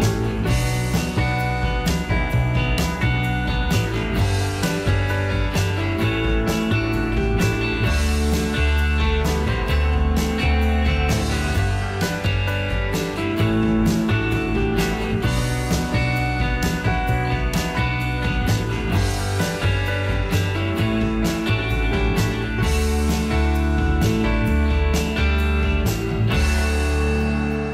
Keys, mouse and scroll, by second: 17.9 2.